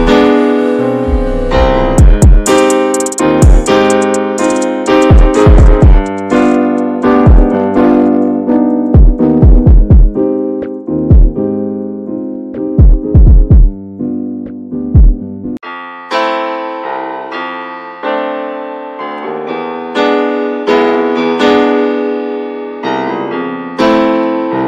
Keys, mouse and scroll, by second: 4.4 click, 4.5-7.2 scroll up 2, 7.2-9.3 scroll up 1, 9.6 shift+middle click, 10.4 f, 12.9-13.5 scroll up 4, 13.5-14.1 scroll down 7, 14.1 shift+middle click, 14.7-15.2 scroll up 1, 15.2-15.7 scroll down 2, 15.7 shift+middle click, 16.0-17.6 scroll up 1, 20.9 click, 21.5 middle click, 21.8 scroll up 1, 22.2 middle click, 22.7 ctrl+z, 23.5-24.6 alt+middle drag.